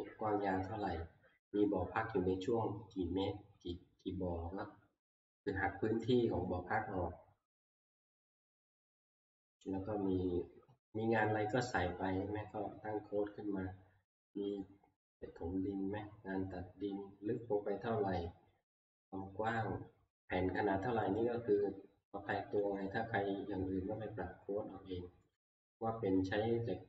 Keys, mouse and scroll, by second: 7.0-8.4 scroll, 9.1-12.1 scroll, 13.3 scroll, 22.8 click, 25.6 middle click.